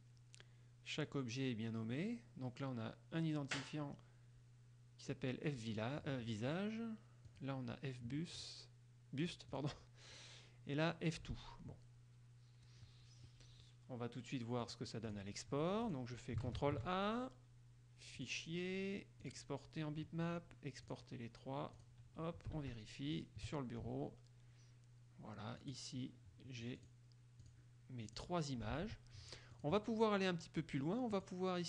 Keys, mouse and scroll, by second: 7.5 click, 9.7 click, 14.8 click, 15.1 click, 16.0 click, 16.7 ctrl+a, 18.3 click, 19.3 click, 21.0 click, 21.9 click, 22.7 alt+Tab, 23.3 alt+click, 25.8 click, 27.0 click, 27.6 click, 28.3 click, 28.9 alt+Tab, 29.7 click, 31.3 click.